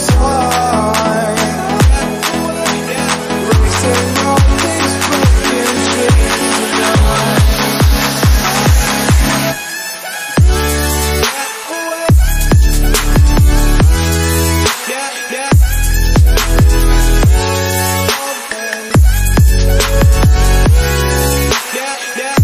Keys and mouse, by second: 3.0-4.6 drag, 4.6 g, 8.3 i, 9.5-13.5 drag, 13.5 g, 15.6-16.0 drag, 16.0 g.